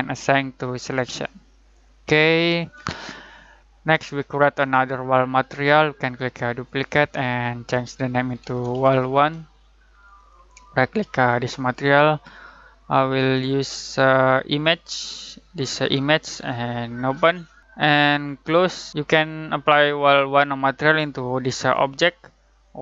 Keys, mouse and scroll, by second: 0.8 click, 3.6 click, 5.1 right click, 6.5 click, 8.0-9.6 typing, 10.1 click, 18.6 click, 21.5 click.